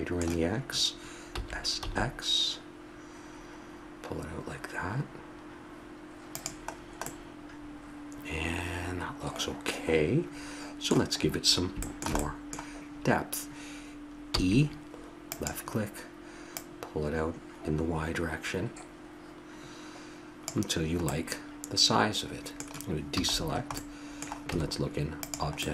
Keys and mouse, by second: 1.4 s, 7.2-14.1 middle drag, 14.4 e, 16.6-20.6 drag, 21.2-22.9 middle drag, 23.2 a, 23.5 middle click, 24.7 Tab.